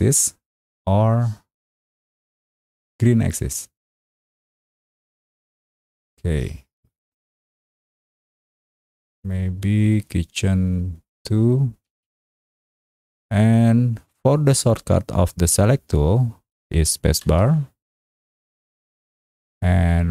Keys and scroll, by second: 11.9 Escape, 17.2 Escape, 17.3 space.